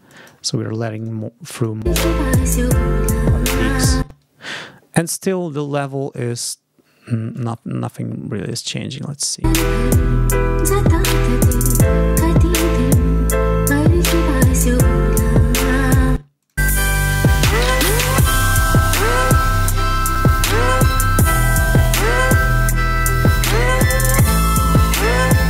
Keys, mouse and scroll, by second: 0.0 click, 0.8 click, 1.4 click, 1.7 space, 3.9 space, 5.4-7.5 drag, 7.9 ctrl+scroll down 2, 8.5 ctrl+click, 9.4 space, 16.0 space, 16.3 click.